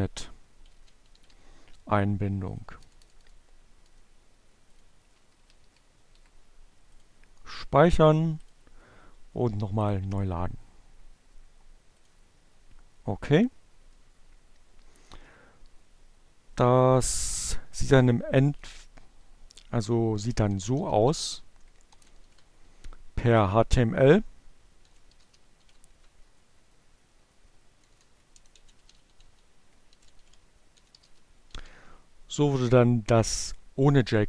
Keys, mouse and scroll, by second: 0.6 shift+<, 1.5 click, 1.8 BackSpace, 3.3 click, 3.7 Delete, 5.2 click, 6.7 click, 7.7 click, 10.8 click, 16.0 click, 17.2 space, 19.3-21.0 typing, 22.4 b, 23.9-25.0 typing, 25.0 shift+Left, 27.3-30.9 typing.